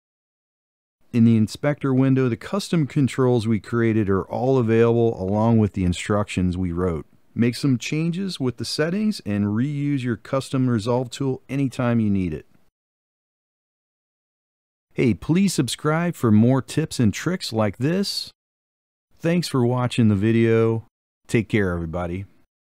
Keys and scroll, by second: 21.9 Left, 22.7 Left.